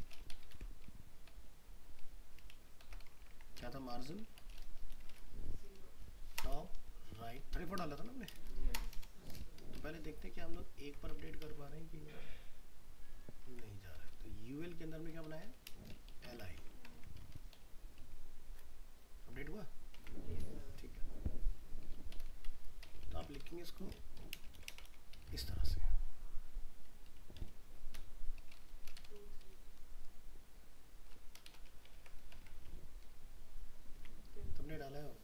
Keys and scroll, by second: 0.5 ctrl+v, 10.6 ctrl+s, 11.2 alt+Tab, 16.6 ctrl+s, 17.0 alt+Tab, 20.0 alt+Tab, 23.1 ctrl+c, 24.6 ctrl+v, 31.9 ctrl+s, 32.4 alt+Tab.